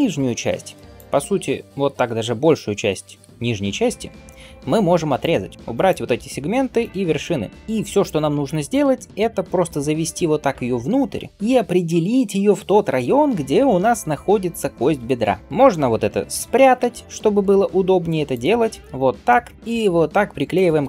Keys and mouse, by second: 0.8-7.5 drag, 3.1 x, 6.0 x, 7.5-16.7 middle drag, 9.5 g, 15.2 Tab, 16.7 h, 18.2 click, 18.8 Tab, 19.5 ctrl+g.